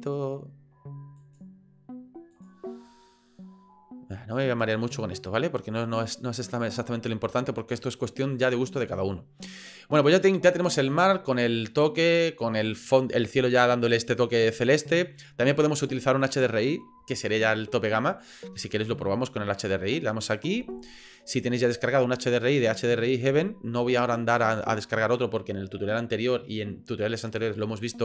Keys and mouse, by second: 0.1 middle click, 1.5 middle click, 2.7 middle click, 5.0 middle click.